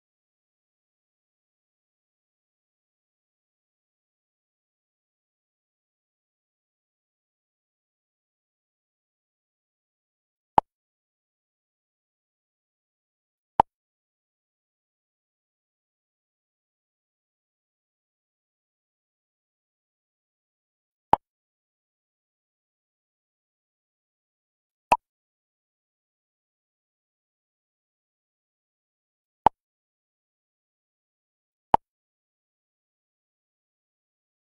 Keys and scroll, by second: 5.4 ctrl+n.